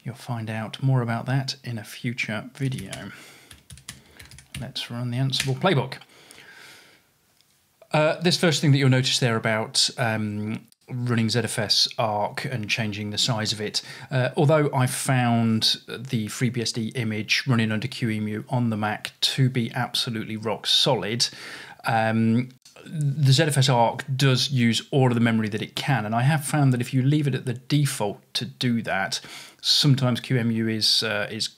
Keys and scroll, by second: 2.5-5.5 typing.